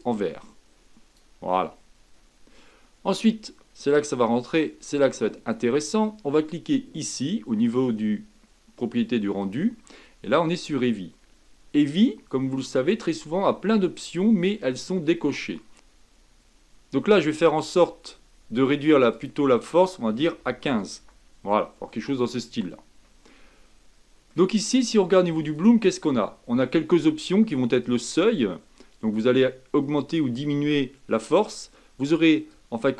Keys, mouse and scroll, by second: 0.0 click, 15.7-21.0 middle drag, 21.0-23.3 drag, 23.3-27.9 middle drag, 27.9-30.8 drag, 32.6-32.9 drag.